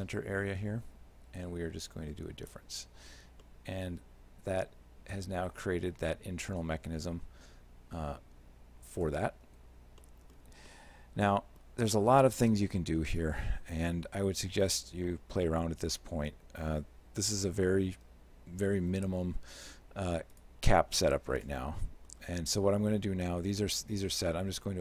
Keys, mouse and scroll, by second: 2.5 click, 3.5 shift+middle click, 6.4 z, 6.8 shift+middle click, 9.5 z, 10.1 middle click, 10.7 shift+middle click, 15.1 shift+middle click, 19.3 alt+h, 20.4 right click, 21.1 shift+middle click.